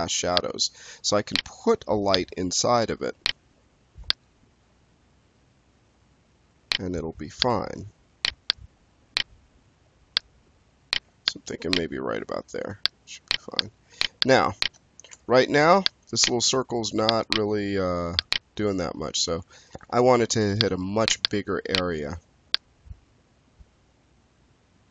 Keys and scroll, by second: 15.0 5, 19.5 e.